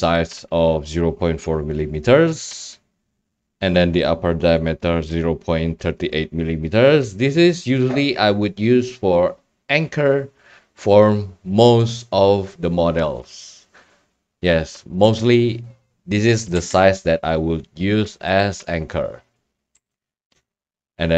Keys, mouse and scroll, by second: 0.3 click, 11.9-13.0 drag, 16.5 e, 19.7 a, 20.3 Tab.